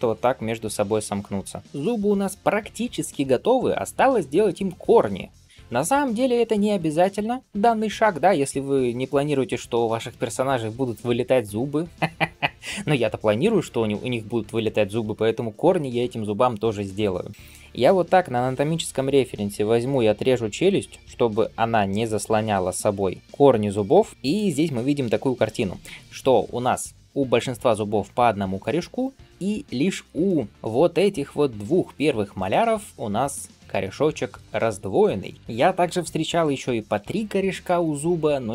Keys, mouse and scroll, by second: 1.6 click.